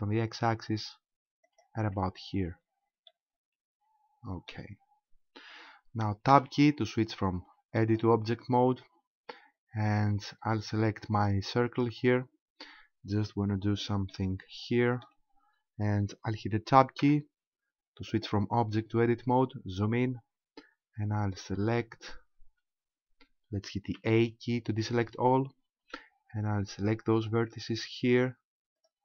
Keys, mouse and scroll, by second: 1.6 ctrl+click, 2.2-3.1 scroll down 4, 3.1 shift+middle click, 3.1 scroll down 1, 8.8-10.4 scroll down 1, 11.7 right click, 14.1 shift+middle click, 15.2-15.9 scroll up 2, 17.0 Tab, 19.1-21.0 scroll up 3, 21.7 shift+right click, 24.0 a, 27.2 right click, 28.0 shift+right click, 28.9 shift+right click.